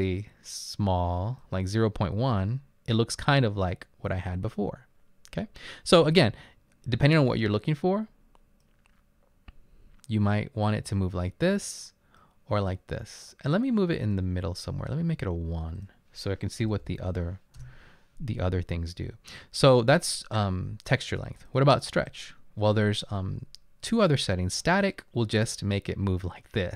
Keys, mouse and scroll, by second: 16.7 BackSpace, 16.9 BackSpace, 17.1 BackSpace, 17.6 Return.